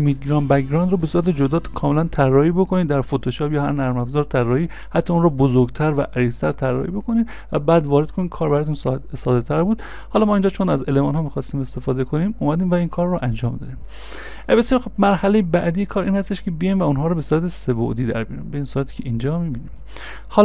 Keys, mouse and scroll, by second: 20.3 y, 20.3 right click.